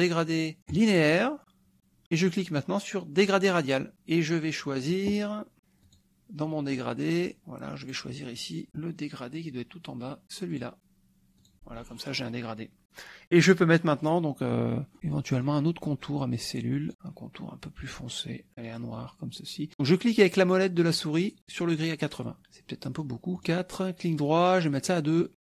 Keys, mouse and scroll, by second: 0.7 click, 3.2 click, 5.9 click, 7.9 click, 8.7 scroll down 1, 10.5 click, 11.4 click, 14.0 click, 15.1 middle click, 15.9-16.9 drag, 23.4 right click, 24.9 click.